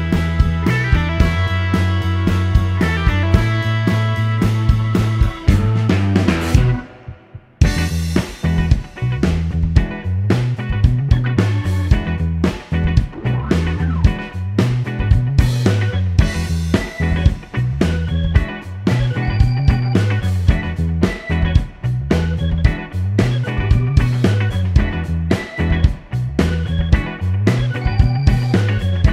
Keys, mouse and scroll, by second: 0.8-3.2 drag, 3.6 middle click, 5.9 click, 7.9 click, 8.9 click, 9.8 click, 10.8 click, 14.7 shift+r, 16.2-17.5 typing, 17.7 Return, 20.2-20.6 scroll up 2, 20.8-21.3 scroll up 2, 24.8-29.1 drag.